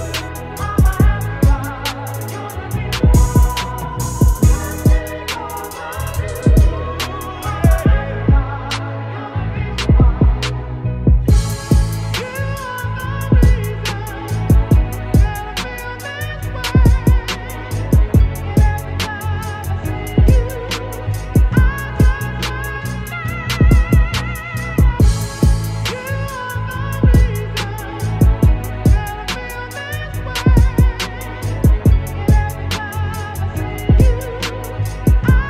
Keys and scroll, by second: 5.9 v, 15.5 ctrl+t, 17.8 Up, 18.2 Return, 19.1 ctrl+z, 19.5 ctrl+t, 21.7 Return, 26.1 b, 26.9 ], 28.5 x, 29.0 ctrl+z, 30.3 ctrl+z.